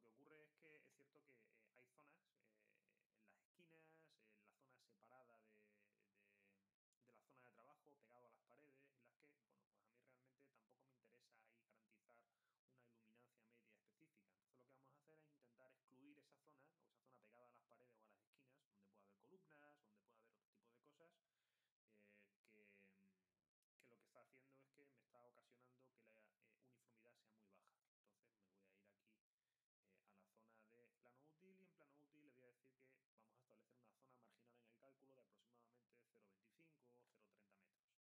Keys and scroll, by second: 37.9-38.0 typing.